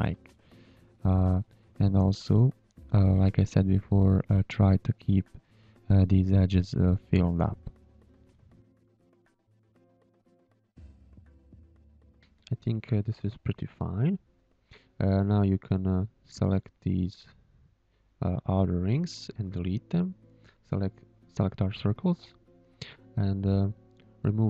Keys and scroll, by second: 1.0 space, 5.4 z, 5.9 space, 8.1 shift+a, 11.2 z, 11.8 space, 12.8 space, 13.3 z, 14.8 space, 16.1 v, 16.6 shift+a, 18.0 v, 19.7 Delete, 20.6 Delete, 21.5 space, 22.6 ctrl+h, 23.0 space, 23.9 Tab.